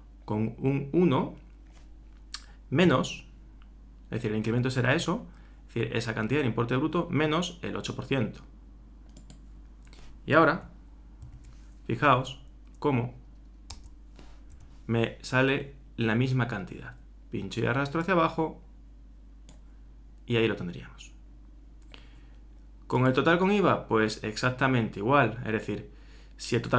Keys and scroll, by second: 11.2 shift+9.